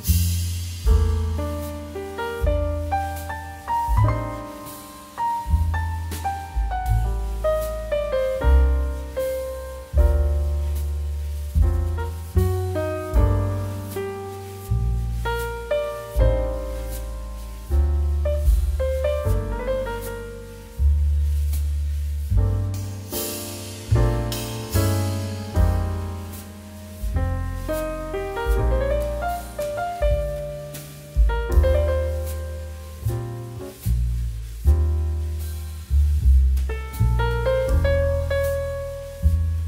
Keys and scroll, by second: 10.2 Return, 12.1 ctrl+a, 14.4 ctrl+d, 20.5 ctrl+t, 29.9 Return.